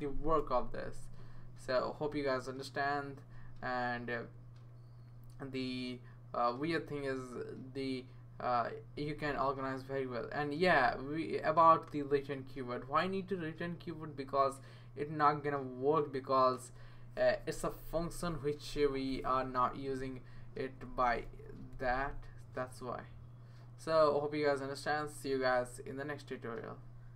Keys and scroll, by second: 21.3 typing.